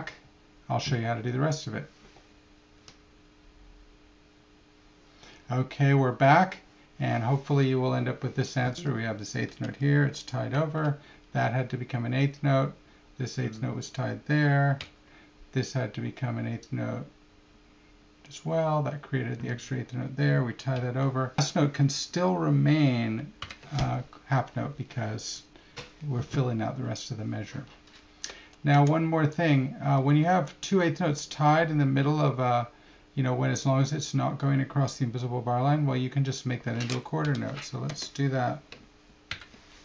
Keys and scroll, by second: 23.4 alt+§, 28.3 Left, 28.8 Left, 30.3 Left, 36.2 Right, 37.9 Left.